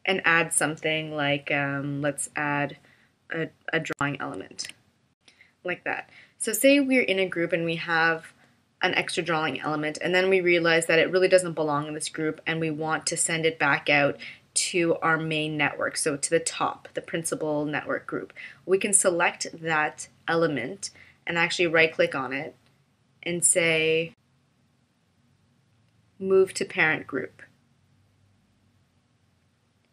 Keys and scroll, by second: 4.5 super+r.